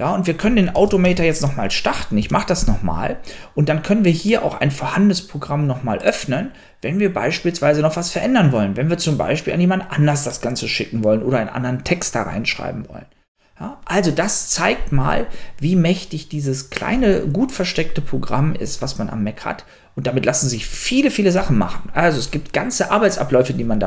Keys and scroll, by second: 1.0 super+space, 1.0-1.9 typing, 2.4 Return.